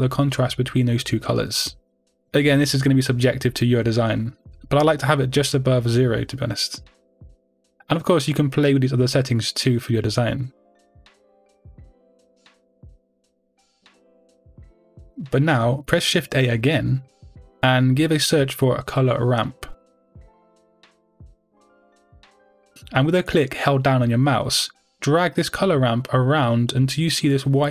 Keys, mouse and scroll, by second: 0.1-5.0 middle drag, 2.6 scroll up 2, 5.0-11.3 drag, 11.1 scroll down 2, 11.3-27.7 middle drag.